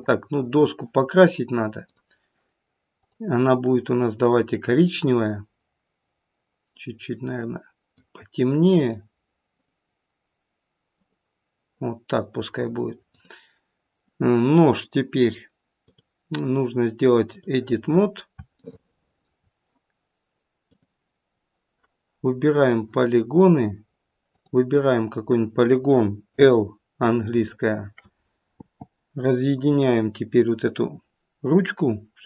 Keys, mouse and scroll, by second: 0.3-0.8 scroll down 1.